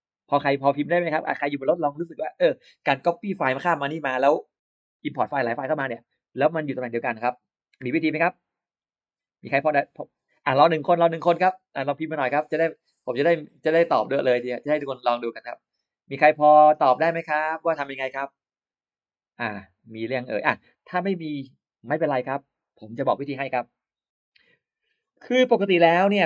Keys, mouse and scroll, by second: 25.9 click.